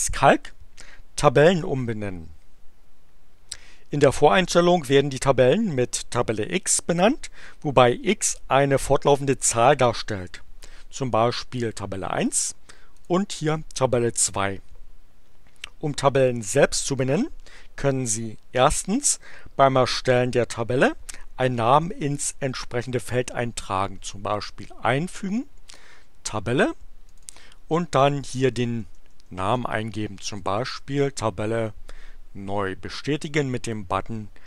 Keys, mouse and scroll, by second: 10.0 click, 12.9 click, 24.3 click, 25.6 click, 27.0 click, 28.4 BackSpace, 30.2-31.3 typing, 33.6 click.